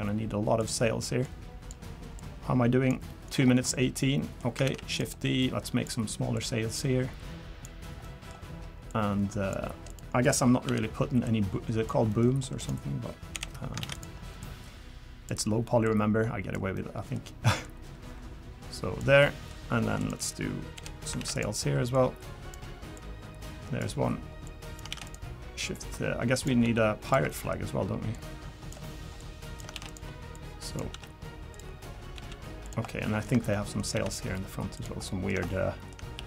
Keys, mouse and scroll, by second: 1.2 click, 2.2 click, 3.1 middle click, 3.3-3.7 scroll down 2, 3.7 middle click, 4.6 shift+d, 5.4 click, 6.3 click, 8.0 middle click, 8.3-8.9 scroll up 3, 8.9 click, 9.9 click, 10.3 click, 10.7 l, 11.2 click, 12.1 middle click, 12.6 click, 13.3 l, 13.8 shift+d, 14.4 click, 15.8 click, 16.7 middle click, 17.6 click, 19.2 middle click, 20.0 click, 20.7 l, 21.2 shift+d, 21.9 click, 22.9 click, 24.4 click, 24.9 shift+d, 25.7 click, 26.6 s, 27.3 middle click, 28.1 click, 29.2 click, 29.7 shift+d, 30.3 click, 30.9 s, 32.2 s, 32.9 middle click, 33.5 shift+middle click, 33.9 shift+d, 35.1 middle click, 35.5 shift+middle click, 36.1 r.